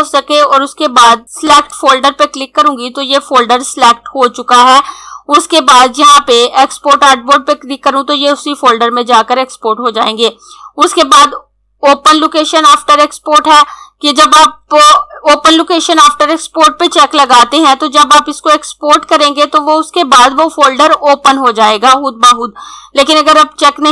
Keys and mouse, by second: 1.5 click.